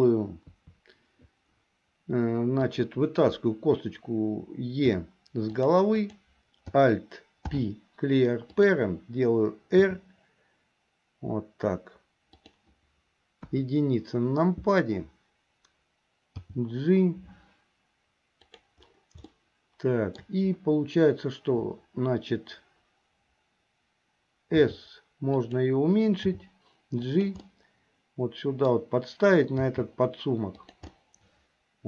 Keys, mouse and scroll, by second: 0.5 KP_3, 2.7 click, 5.0 e, 6.0 click, 7.5 alt+p, 9.8 r, 13.5 KP_1, 16.4 g, 19.5 shift+middle click, 24.6 s, 26.3 g, 27.5-28.9 middle drag, 29.8 g, 31.0-31.8 middle drag.